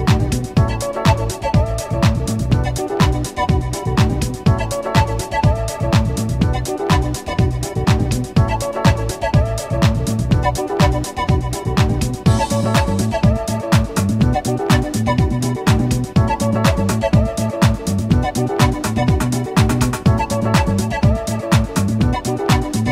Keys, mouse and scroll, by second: 0.4 click, 1.8 ., 2.1 9, 2.3 8, 2.6 Return, 4.9 i, 6.5-8.3 drag, 9.7 shift+F6, 13.1 v, 14.1 click, 15.9 click, 19.1 scroll down 1, 19.8 scroll up 1, 21.9 m, 22.1 2, 22.5 Return.